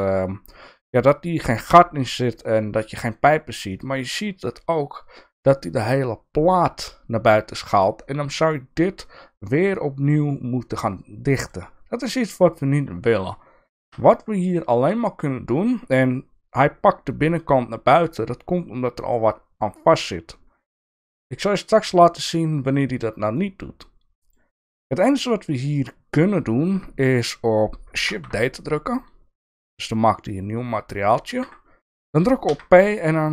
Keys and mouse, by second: 0.0 alt+z, 3.7 middle click, 8.5 middle click, 10.8 middle click, 13.9 ctrl+z, 23.4 middle click, 25.1 middle click, 28.1 shift+d, 32.5 p.